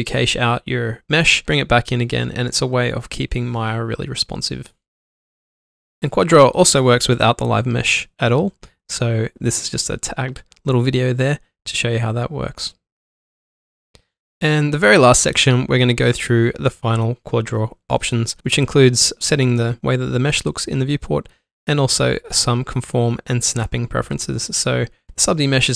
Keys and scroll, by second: 2.5 ctrl+Num_Lock, 2.7 ctrl+alt+shift+q, 4.2 ctrl+shift+q, 5.1 ctrl+z, 5.4 alt+m, 7.1 ctrl+z, 7.6-9.8 typing, 12.0 alt+shift+d, 12.1 shift+2, 20.7 ctrl+alt+3, 21.6 1, 24.0 ctrl+alt+3, 24.7 ctrl+alt+1, 25.3 b.